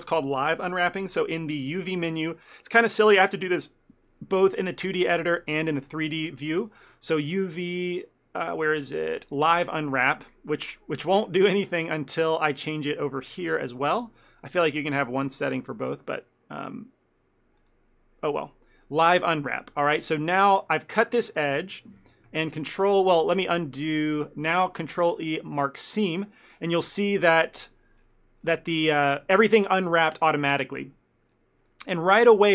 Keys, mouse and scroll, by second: 1.7 click, 11.0 middle click, 17.7 click, 20.6 middle click, 21.4 alt+click, 22.0 KP_Decimal, 23.5 ctrl+z, 24.0 ctrl+z, 25.3 ctrl+e, 26.6-27.4 scroll down 10, 27.4 shift+middle click, 28.1-28.7 scroll up 9, 28.8 shift+middle click, 31.4 scroll up 2, 31.8 shift+middle click.